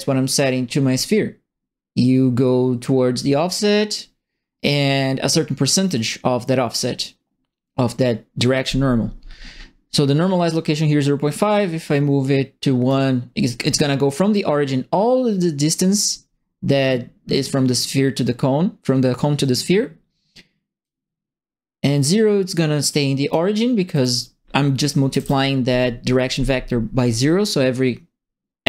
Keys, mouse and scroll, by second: 5.9 click, 11.2-12.8 drag, 20.8-23.3 drag, 23.9 click, 25.1 KP_0, 25.1 KP_Enter.